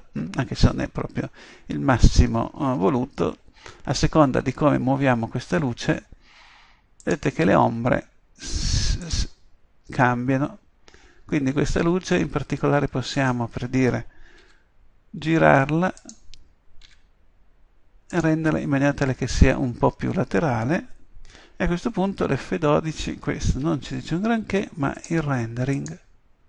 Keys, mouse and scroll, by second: 1.1-4.4 middle drag, 14.5 g, 16.9 r, 23.5 F12, 23.5 Escape.